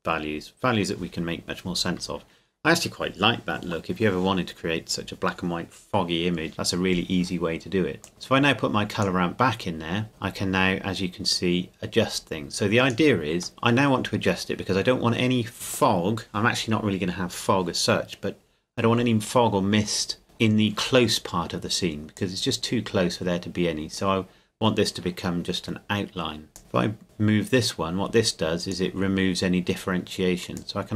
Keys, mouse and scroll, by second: 8.0 click, 13.5-14.1 scroll up 1, 22.1 click, 26.5 click.